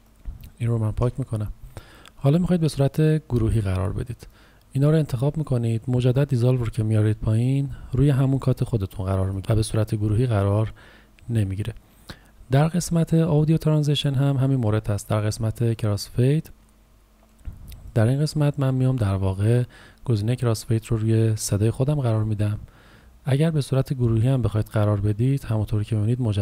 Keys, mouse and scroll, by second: 1.0 Delete, 2.6 click, 9.4 Delete, 11.3 click.